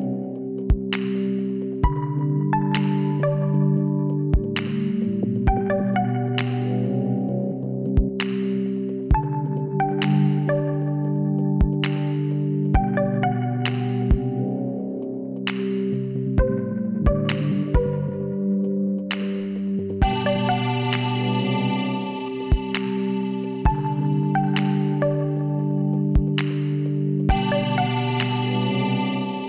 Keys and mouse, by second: 2.7 KP_1, 3.5 click, 4.1 middle click, 5.3 s, 8.9-10.5 middle drag, 11.1 click, 11.5 z, 14.8-16.6 middle drag, 16.1 e, 20.4 t, 21.2-23.4 middle drag, 22.6 e, 25.1-26.2 drag, 26.0 b, 27.1 middle click, 27.7 z.